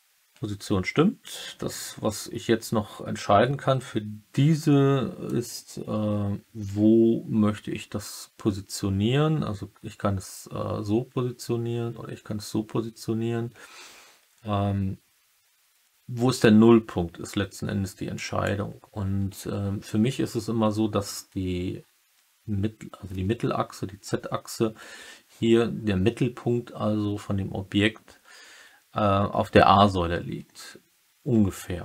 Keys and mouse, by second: 5.2-18.4 drag.